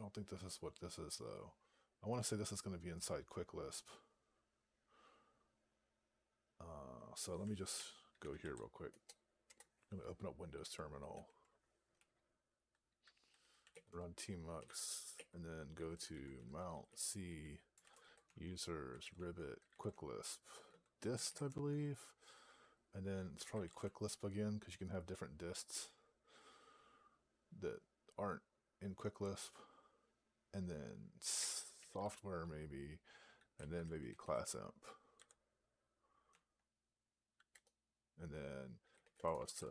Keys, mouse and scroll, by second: 13.8 right click.